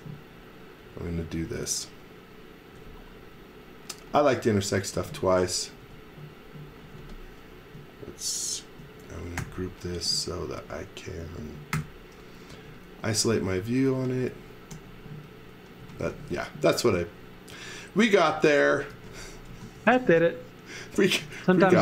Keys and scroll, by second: 4.9 e, 5.8 space, 6.8 space, 9.4 g, 11.7 shift+3, 12.5 e, 13.5-16.5 typing, 18.4 x, 18.9 v, 19.5 x, 19.7 v, 21.0-21.8 typing.